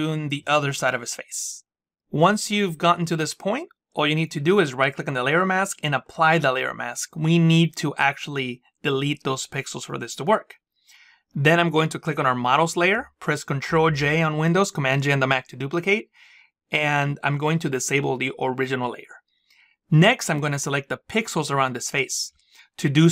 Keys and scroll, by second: 13.1 ctrl+j.